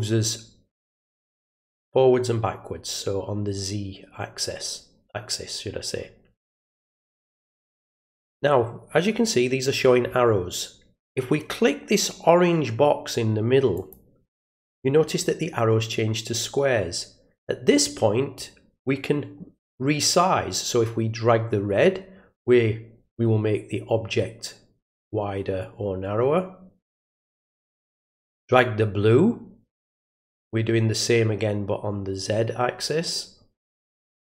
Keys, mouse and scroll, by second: 13.7 click, 18.3-27.8 drag, 28.5-34.3 drag.